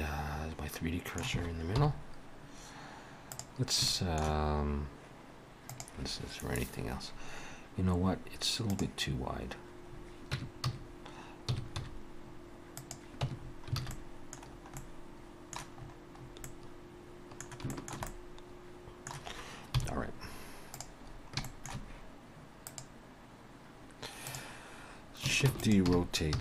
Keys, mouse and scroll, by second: 1.8 KP_7, 3.3 click, 3.9 shift+middle click, 10.0-10.4 scroll up 3, 10.4 Tab, 10.7 a, 11.5 s, 13.3 Tab, 13.4 scroll down 4, 13.8 alt+a, 13.9 middle click, 14.5 scroll down 1, 14.8 middle click, 15.8-16.9 scroll up 6, 16.5 middle click, 17.7 shift+middle click, 18.1 middle click, 19.8 KP_7, 20.7 click, 21.1-21.5 scroll down 3, 21.5 shift+middle click, 22.6 click, 25.5 shift+d, 25.8 r.